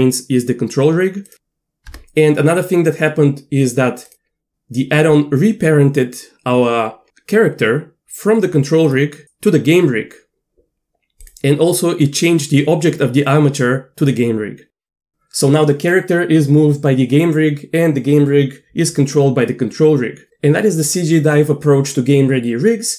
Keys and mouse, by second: 1.2 click, 1.9 Tab, 4.1 click, 8.8 click.